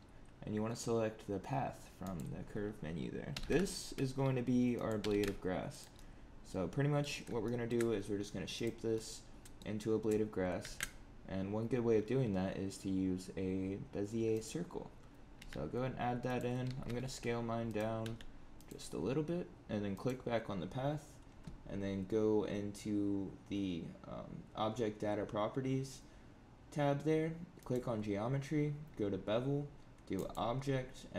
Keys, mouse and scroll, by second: 3.2 g, 4.9 g, 5.9 middle click, 7.2 scroll up 1, 7.4 shift+middle click, 8.5 click, 8.9 middle click, 10.5 shift+a, 15.3 s, 16.6 g, 17.9 s, 19.9 click, 27.5 click, 30.1 click.